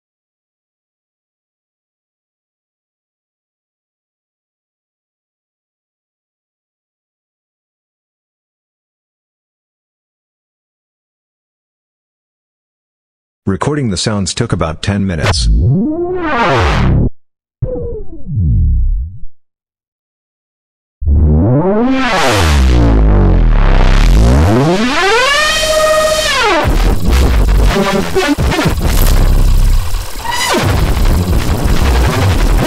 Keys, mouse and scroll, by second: 0.4 click, 4.4 click, 5.6 click, 8.8 click, 11.1-12.6 drag, 13.9 click, 15.2-17.2 drag, 17.6-19.4 drag, 20.2 click, 20.9-26.6 drag, 30.7-32.6 drag.